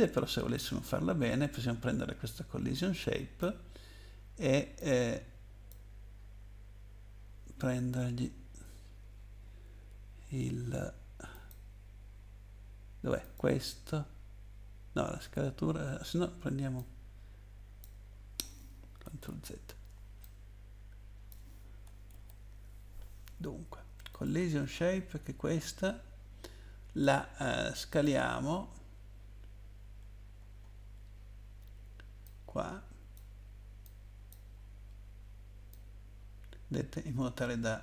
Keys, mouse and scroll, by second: 0.5 click, 4.8 click, 7.5 scroll up 2, 11.3 click, 13.2 click, 16.8 click, 18.2 scroll down 1, 19.3 ctrl+z, 20.2 click, 22.1 ctrl+z, 24.1 click, 25.6 scroll down 1, 27.9 click, 29.9-30.4 scroll down 1, 30.4 scroll up 1, 30.9-31.6 scroll down 1, 32.2 click, 33.8 click, 34.7 scroll down 2, 35.7 click.